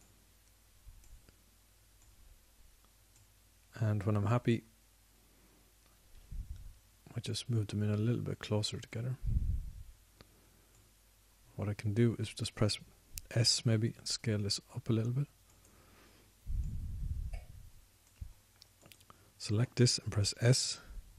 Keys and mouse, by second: 3.3 click, 5.6-6.0 drag, 13.6 middle drag, 14.7 s, 17.7 click.